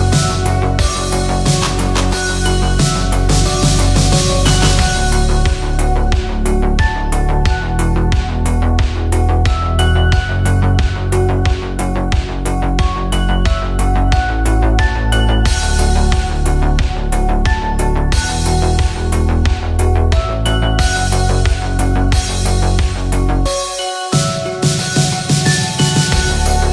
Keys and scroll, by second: 6.6 ctrl+t.